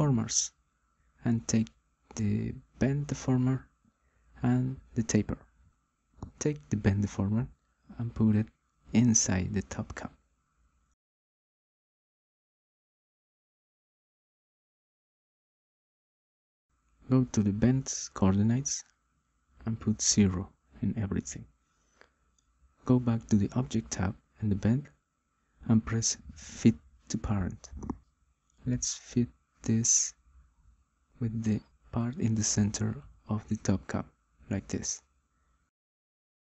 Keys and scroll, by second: 18.4 0, 18.9 Return.